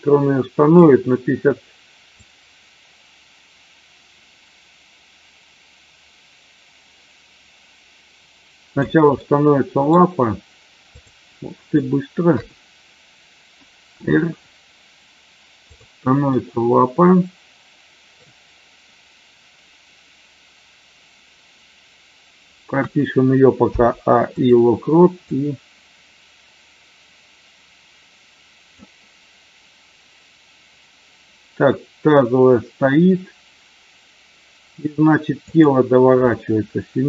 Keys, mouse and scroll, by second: 2.3-8.9 drag, 9.0-9.9 middle drag, 10.9 click, 14.0 r, 15.6-16.3 drag, 16.3-18.1 middle drag, 22.8 a, 23.6 i, 25.2-28.7 drag, 35.4 click.